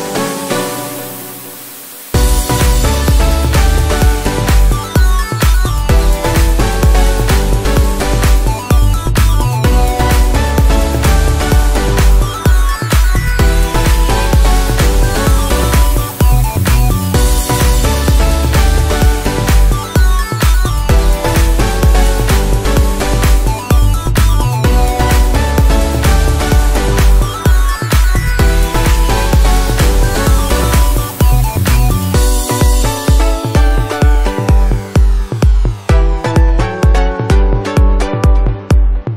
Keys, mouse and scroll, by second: 6.7 ctrl+j, 9.0 alt+click, 9.6 click, 13.2-14.0 typing, 17.6-18.8 typing, 19.8 space, 23.1 shift+7, 24.1 space, 25.3 shift+b, 26.8-27.6 typing, 34.0 right click, 36.9 right click.